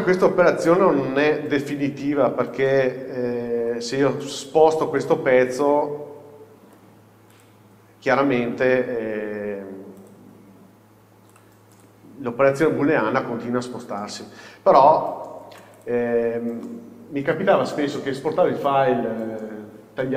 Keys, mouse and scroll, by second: 0.3 h, 0.9-1.3 scroll down 1, 1.3-4.3 middle drag, 1.9-3.7 scroll up 1, 3.7 alt+h, 4.3 click, 5.1-7.5 middle drag, 6.7 g, 7.5 click, 9.0 g, 10.2 click, 11.4 drag, 11.8 click, 12.9 h, 15.3 alt+h, 15.9 click, 16.3-16.7 scroll down 1, 16.7-20.1 middle drag.